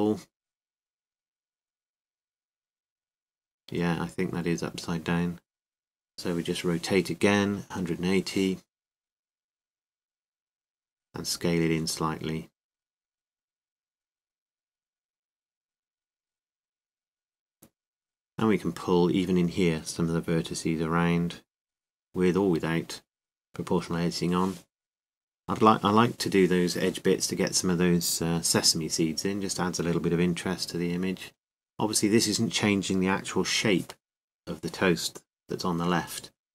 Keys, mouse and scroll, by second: 1.1 g, 8.0 r, 9.9 r, 11.8 s, 18.7-20.1 drag, 18.7 a, 20.1 c, 21.6 c, 32.3 g, 35.3 g.